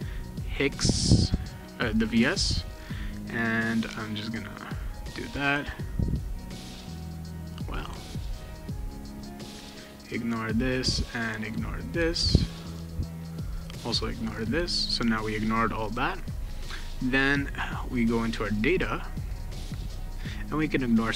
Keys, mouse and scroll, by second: 4.4 right click, 6.1 click, 6.6 click, 7.1 click, 7.8 click, 8.1 right click, 9.2 click, 10.3 click, 10.5 right click, 11.5 click, 12.6 click, 13.0 right click, 13.8 click, 17.0 click, 17.4 click, 18.7 click, 19.6 click, 20.8 click.